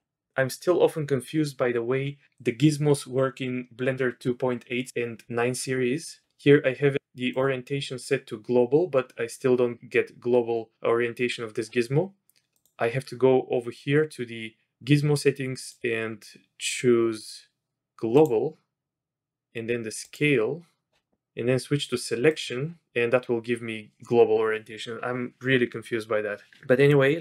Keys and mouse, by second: 7.3-9.2 drag, 12.5-20.9 drag, 22.3 click, 26.9-27.2 drag.